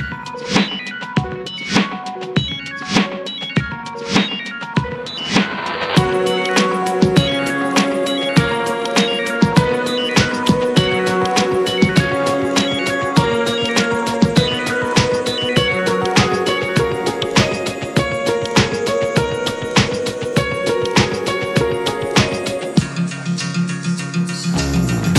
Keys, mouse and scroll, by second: 1.6 alt+middle click, 2.4 r, 4.6 alt+middle click, 5.9 r, 7.0 drag, 7.4 r, 8.4 click, 8.6 r, 9.4 r, 10.0 drag, 10.2-10.9 middle drag, 10.9 click, 11.2-13.1 shift+middle drag, 13.1 scroll down 3, 13.4 click, 14.7 ctrl+j, 15.2-15.6 middle drag, 15.6 s, 16.8 scroll down 3, 17.0-17.8 middle drag, 17.8 click, 18.4-19.1 middle drag, 19.1 click, 19.9 drag, 20.2 middle drag, 20.4-21.0 scroll up 4, 20.7 shift+middle click, 21.2 Tab, 21.5 middle click, 22.3 Tab, 22.6 click, 22.9-23.9 middle drag, 23.9 scroll down 4, 24.2-25.1 shift+middle drag.